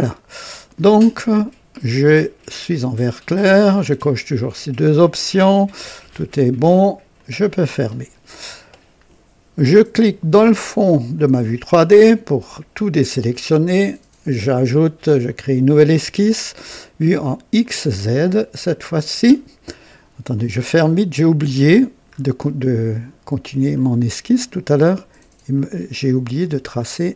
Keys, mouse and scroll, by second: 0.1-0.4 scroll up 1, 0.6-1.3 right drag, 7.1 click, 11.1 click, 15.2 click, 17.6 click, 18.7 click, 20.3 click, 21.2 click, 22.1 scroll up 1, 23.7 click, 25.5 click.